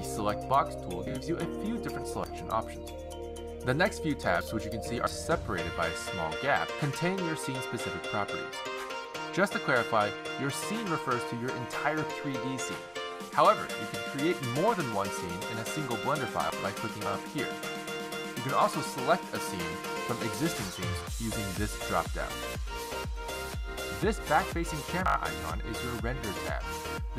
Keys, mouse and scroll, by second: 17.3 click, 19.8 click, 22.2 click, 23.3 click, 24.4 click.